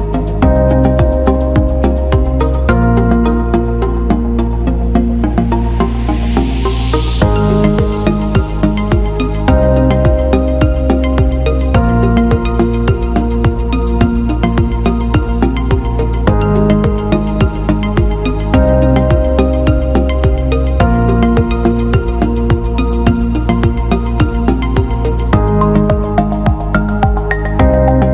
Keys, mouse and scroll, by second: 0.7 shift+click, 2.2 shift+click, 3.8-4.8 shift+drag, 6.9-11.3 drag, 11.5 ctrl+z, 12.1 click, 13.0 click, 14.0 shift+click, 15.7-17.9 drag, 18.1 click, 18.4 alt+middle click, 19.7 click, 21.0 alt+middle click, 21.8 drag, 22.4-23.2 alt+middle drag, 23.9 alt+middle click, 24.5-26.7 ctrl+z, 27.2 alt+shift+middle click, 27.7 click.